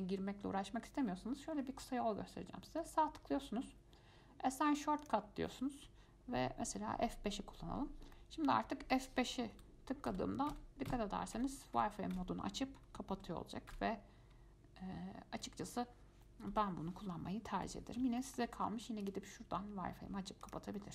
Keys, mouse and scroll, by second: 8.3-9.7 middle drag, 9.7 F5, 10.3 F5, 10.7 F5, 11.1 F5, 11.6 F5, 12.3 F5, 13.3 F5, 13.9 F5, 16.7 F5, 17.8 F5, 18.4 shift+middle click, 19.2-20.7 drag.